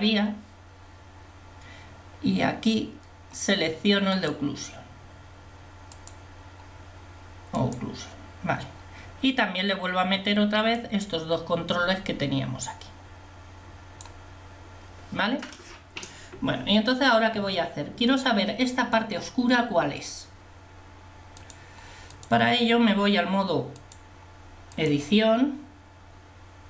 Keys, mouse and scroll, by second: 0.0 click, 25.8 middle click.